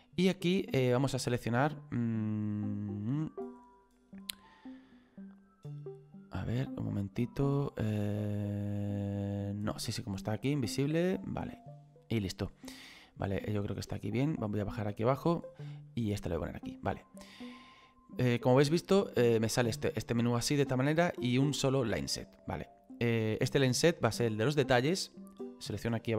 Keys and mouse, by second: 5.2 click, 7.7 click, 9.9 click, 13.9 click, 15.9 click, 19.0 click, 25.6 click.